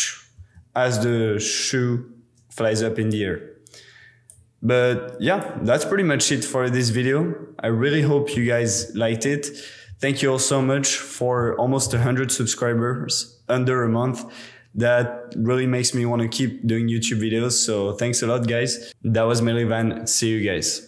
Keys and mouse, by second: 0.4 space, 3.5-4.3 middle drag, 4.3-5.5 drag, 5.5 middle drag, 6.7 super+s, 7.8 middle click, 8.0 click, 8.8 z.